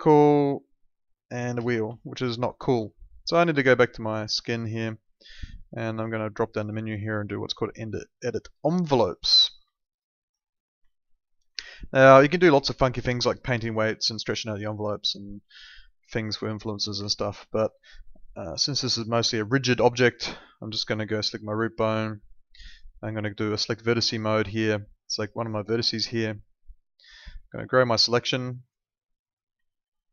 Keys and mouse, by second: 1.5 ctrl+z, 2.0 alt+middle click, 2.9 alt+middle click, 3.8 click, 8.9 alt+middle click, 9.7 alt+middle click, 10.9 alt+middle click, 11.6 alt+middle click, 14.7 click, 17.0 ctrl+z, 17.4 alt+middle click, 19.9 click, 23.6 click, 29.7 alt+middle click.